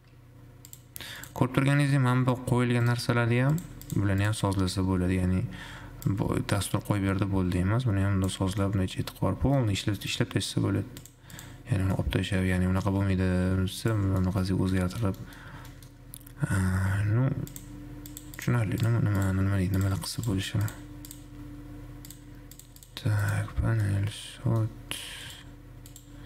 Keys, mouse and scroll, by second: 0.0 click, 0.9 click, 1.4 click, 1.8 scroll up 5, 2.3 g, 3.8 click, 4.4 click, 6.3-8.8 drag, 8.8-9.8 middle drag, 9.8 scroll down 4, 10.1 middle click, 10.3-11.3 scroll up 4, 11.6 click, 12.3-13.3 middle drag, 13.3 g, 14.4-14.8 middle drag, 14.8-15.9 scroll down 5, 15.0 middle click, 15.9-16.5 middle drag, 16.5-17.6 scroll up 6, 17.6 scroll up 1, 18.3 click, 19.0 click, 19.4 click, 20.0 click, 20.4 click, 23.0 click, 23.4 click, 24.1-25.4 middle drag, 25.4 click.